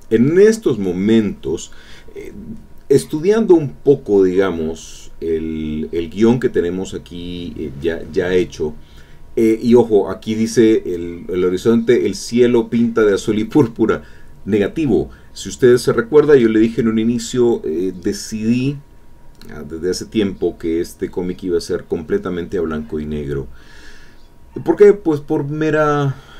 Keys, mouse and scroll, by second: 8.2-10.0 drag, 11.1 click, 13.5 alt+Tab, 19.8 alt+Tab, 22.2-23.8 drag.